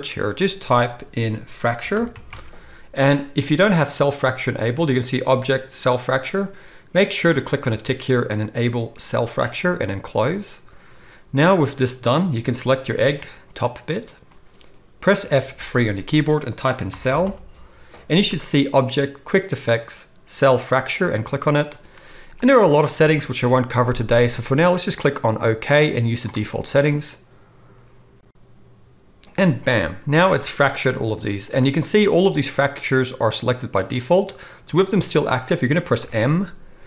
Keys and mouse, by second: 11.4-36.8 middle drag, 12.5 g, 15.2 F3, 17.2 l, 30.2 g, 32.1 g, 36.0 m.